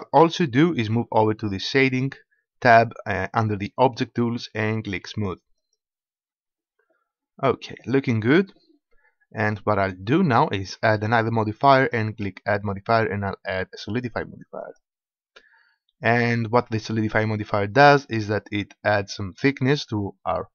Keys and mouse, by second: 5.7-7.4 drag, 11.8-13.8 drag.